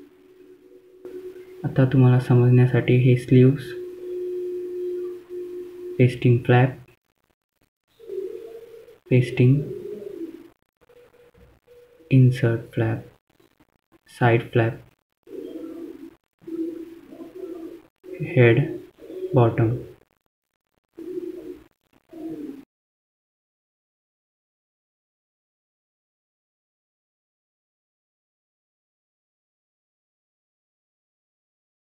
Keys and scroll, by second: 28.8 F3, 29.1 F2.